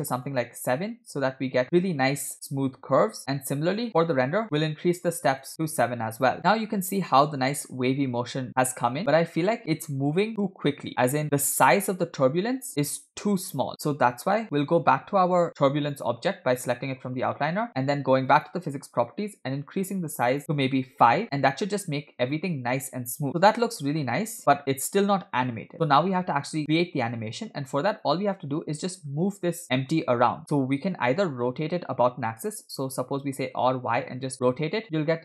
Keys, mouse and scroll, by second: 0.5 click, 3.8-4.1 scroll up 1, 5.0 click, 5.5 click, 6.3 click, 15.8-18.1 drag, 18.3 click, 21.1 click, 23.3-23.7 scroll down 4, 25.2 space, 26.1 scroll up 2, 26.1 space, 26.6 scroll down 1, 27.1 space, 27.5 space, 28.9 click, 29.8-30.4 scroll down 1, 33.2 r.